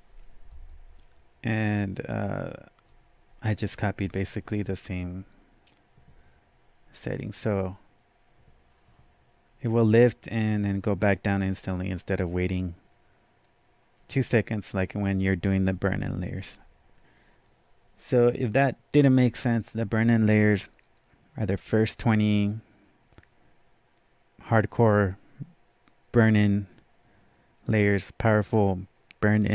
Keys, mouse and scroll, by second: 2.8 scroll down 1, 5.6-6.1 scroll down 1, 6.9-7.3 scroll up 1.